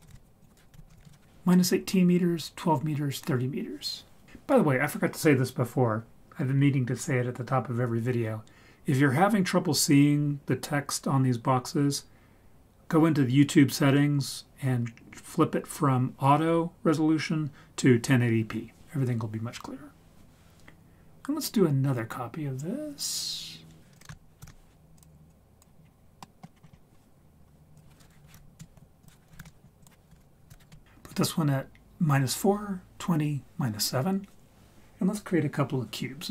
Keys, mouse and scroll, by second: 0.4 click, 23.9 click, 24.4 ctrl+shift+d, 25.2-25.6 drag, 25.8-26.3 scroll down 2, 26.2 middle click, 26.5-27.2 scroll up 6, 27.7 click, 29.0 click, 29.8 click.